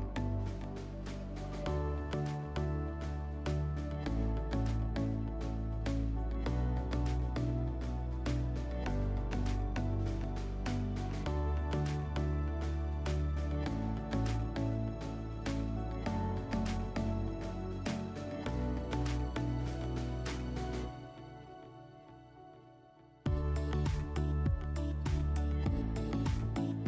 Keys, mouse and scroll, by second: 9.6 click, 14.0 click, 15.0 click, 16.7 click, 21.0-22.5 drag, 23.7-25.3 drag, 25.5-26.8 drag.